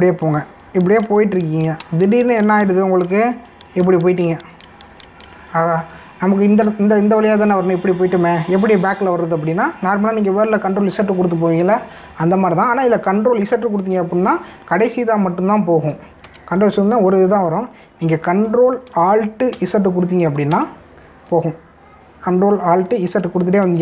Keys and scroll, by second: 2.8 space, 17.3 ctrl+z, 20.6 ctrl+alt+z.